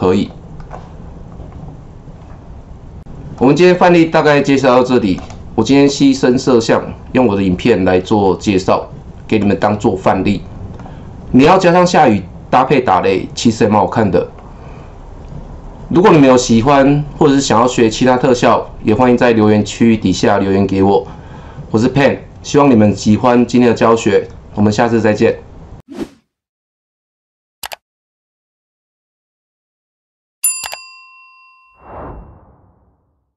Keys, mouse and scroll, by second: 8.7 click, 9.0-13.1 drag, 14.4-24.4 drag.